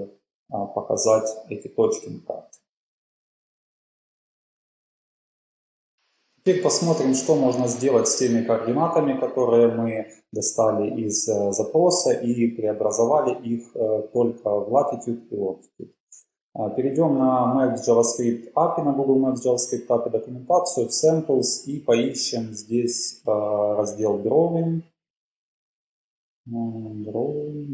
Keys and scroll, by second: 0.8 shift+Up, 1.8 shift+Up, 2.4 shift+super+Right.